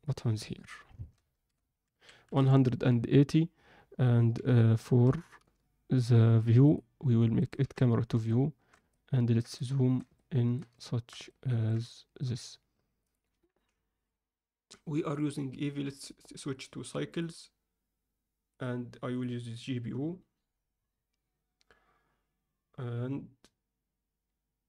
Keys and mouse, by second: 0.1-2.9 drag, 4.3 b, 5.3 n, 6.7-7.5 drag, 8.1 alt+n, 8.2-8.7 alt+shift+middle drag, 8.9-9.3 ctrl+alt+middle drag, 9.5-9.9 alt+shift+middle drag, 10.1 ctrl+middle click, 10.7 shift+middle click, 11.2 ctrl+middle click, 11.9 alt+shift+middle click, 13.1-17.7 drag, 18.6-19.6 drag.